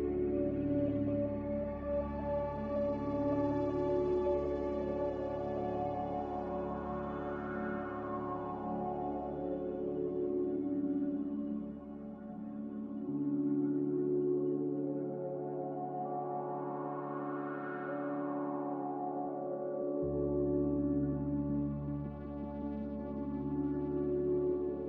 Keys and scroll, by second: 1.6 n, 9.1 z, 14.8 b, 16.3 z, 17.1 Delete, 18.6 g, 23.3 n.